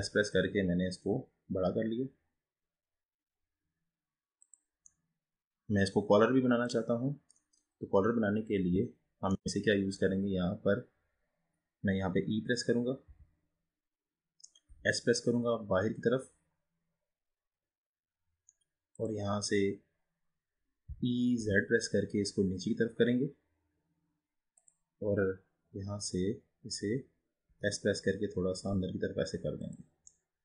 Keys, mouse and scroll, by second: 5.0-7.7 middle drag, 7.7-8.6 scroll up 4, 8.6-9.1 scroll down 3, 9.1-9.5 scroll up 1, 9.5-12.6 middle drag, 13.1 e, 20.9 e, 27.5 s, 30.2-30.4 middle drag.